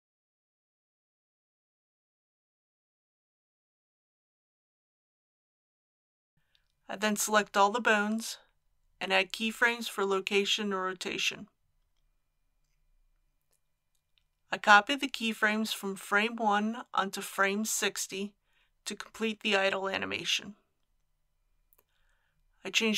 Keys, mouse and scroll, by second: 0.4 click, 2.1 r, 2.3 y, 5.3 click, 7.0 a, 8.4 i, 9.0 click, 15.1 ctrl+c, 16.1-17.7 drag, 17.9 ctrl+v, 19.7 click.